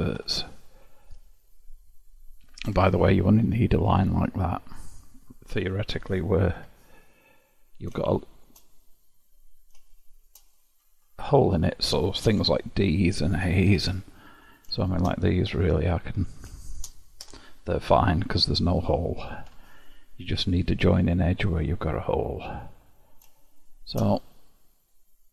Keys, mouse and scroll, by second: 0.3 Tab, 1.1-2.8 scroll down 6, 2.8 Tab, 3.3-3.9 scroll up 6, 3.9 click, 5.0 click, 6.6 Tab, 7.5-8.1 scroll down 1, 8.1 shift+middle click, 8.9-10.0 scroll up 1, 10.0-11.6 shift+middle drag, 11.6 click, 12.5 Tab, 13.8 3, 14.5 click, 15.0 shift+click, 15.6 f, 16.3 click, 17.3 f, 19.6 Tab, 21.4-23.7 scroll down 12, 23.7-24.3 shift+drag, 24.3-25.3 middle drag.